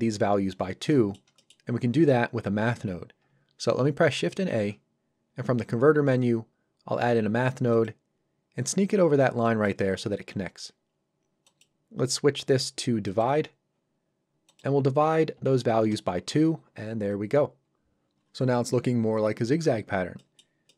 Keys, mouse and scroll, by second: 0.9 middle click, 4.5 shift+a, 7.7 click, 10.9-11.4 scroll up 1, 11.4 click, 15.3 KP_2, 15.8 Return, 20.2 middle click.